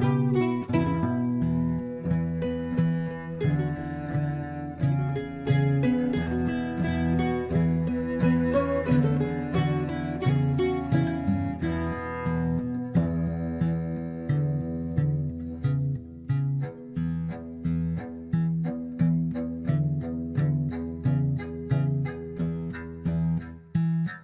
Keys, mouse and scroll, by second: 1.7 s, 6.4-7.7 scroll down 1, 7.7 scroll down 1, 9.0 s, 10.8 s, 12.4 ctrl+z, 12.5 ctrl+z, 12.9-13.3 scroll down 1, 13.3 shift+z, 13.6 scroll down 2, 13.9-15.2 middle drag, 15.2-15.6 scroll up 1, 15.6-16.6 shift+middle drag, 16.6 click, 17.3 click, 17.5 Tab, 17.8-18.3 scroll up 1, 18.4 click, 19.0 click, 19.7 alt+shift+click, 20.1-20.6 scroll up 2, 20.6 e, 22.6 scroll down 1, 22.7-23.7 middle drag, 23.7 KP_1.